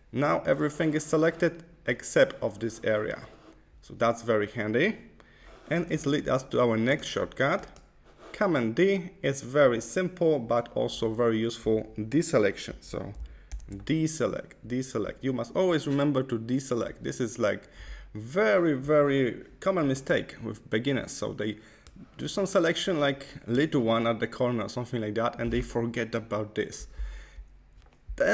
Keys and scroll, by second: 13.4 super+d.